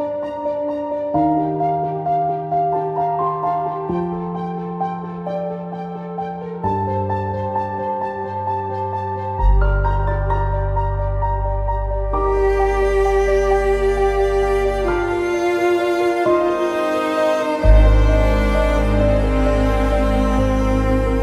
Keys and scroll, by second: 11.2 w.